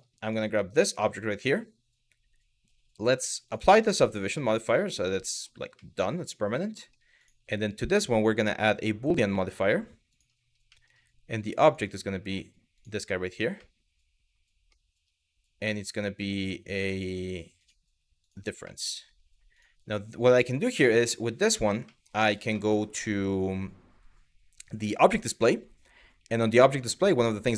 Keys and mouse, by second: 0.7 middle click, 3.1-3.7 drag, 4.0-5.1 middle drag, 5.5-6.6 middle drag, 6.8 click, 7.5-9.9 drag, 10.4 middle drag, 13.3-14.4 middle drag, 16.7 click, 17.2 click, 17.9 click, 18.4 middle drag, 19.2 click, 20.5 middle drag, 21.6 middle click, 24.5 click.